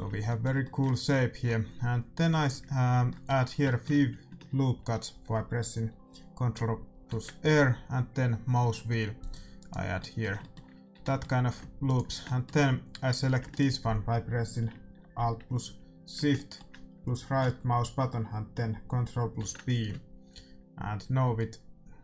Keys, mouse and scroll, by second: 7.0 ctrl+r, 9.9-15.0 middle drag, 10.8 a, 11.8-15.4 right drag, 13.0 a, 16.4-19.3 middle drag, 19.3 ctrl+b.